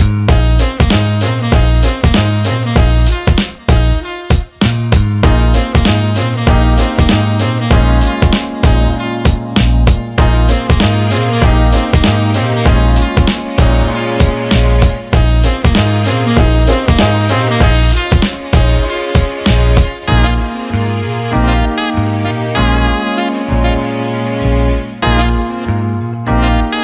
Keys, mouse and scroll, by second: 2.6 click, 4.3 Tab, 5.1-5.8 drag, 6.3-6.7 alt+middle drag, 8.6-9.4 alt+middle drag, 9.9-10.3 alt+middle drag, 10.8 Tab, 11.4 alt+middle click, 12.0 ctrl+alt+middle click, 12.6 click, 13.0 alt+middle click, 14.2 alt+middle click, 14.5 ctrl+alt+middle click, 16.0 alt+middle click, 16.6 alt+middle click, 17.8 shift+click, 18.1 alt+middle click, 19.3 alt+middle click, 20.6 alt+middle click, 21.4 alt+middle click, 23.1 ctrl+b, 25.6 alt+middle click, 26.3 alt+shift+middle click, 26.7 alt+middle click.